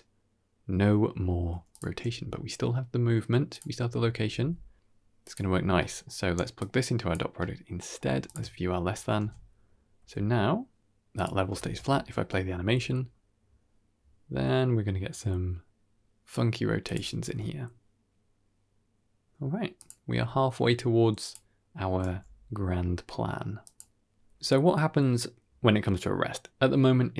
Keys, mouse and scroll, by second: 3.7 g, 4.2 r, 5.5-6.0 scroll down 2, 5.7 middle click, 6.5 click, 7.3 middle click, 7.7 middle click, 8.2 ctrl+shift+click, 9.1 ctrl+space, 9.4-9.9 scroll down 1, 9.9 r, 11.5 shift+space, 12.4 r, 17.1 g, 20.0 r, 21.9 g, 24.2 g.